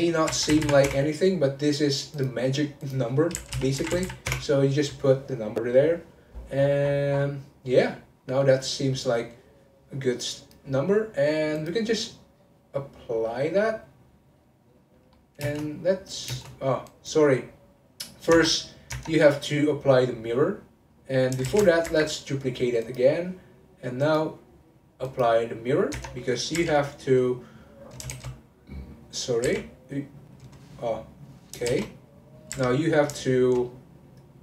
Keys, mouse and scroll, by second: 0.6 m, 2.1 click, 2.8-4.0 drag, 4.0 m, 6.0-8.2 scroll up 12, 8.2-10.2 middle drag, 10.2-11.7 drag, 13.1-13.5 scroll down 2, 13.5-15.4 middle drag, 15.4 space, 16.3 space, 16.9 click, 17.5-18.3 scroll up 3, 18.3 Tab, 18.9 Tab, 21.4 shift+d, 22.8 click, 24.0-25.6 drag, 25.6-25.9 scroll up 1, 25.9 Tab, 27.0 click, 28.1 shift+s, 29.4 2, 29.7 click, 31.1 click, 31.6 shift+s, 32.5 2, 32.7 click, 33.3 shift+click.